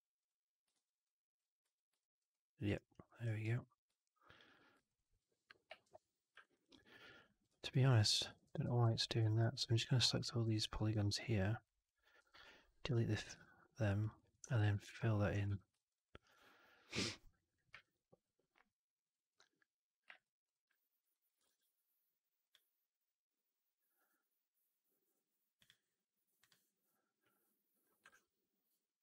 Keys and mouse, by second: 0.1 click, 0.9-1.2 alt+drag, 1.5 3, 1.9 alt+middle click, 2.2 alt+click, 2.6 alt+right click, 2.9 alt+middle click, 3.1 alt+right click, 3.8 2, 4.2 click, 4.8 shift+click, 4.9 click, 5.7 ctrl+BackSpace, 6.3 right click, 6.5 right click, 6.8 middle click, 7.0 right click, 7.4 3, 7.5 click, 8.2 Up, 8.3 Up, 9.3-10.4 Up, 12.1 Delete, 13.2 2, 13.9 click, 14.0 click, 14.5 ctrl+f, 14.9 alt+click, 15.4 4, 15.6 alt+middle drag, 15.8 alt+right drag, 16.0 alt+right drag, 16.2-17.4 alt+drag, 17.6 alt+q, 18.1-19.2 alt+drag, 20.0 click, 20.4 click, 20.6 alt+drag, 21.0 alt+right drag, 21.3 shift+Tab.